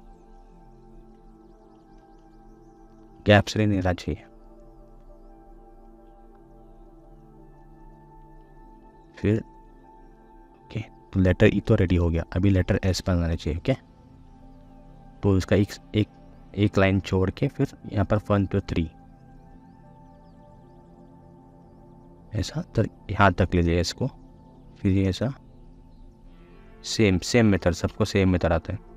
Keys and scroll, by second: 27.8 ctrl+z.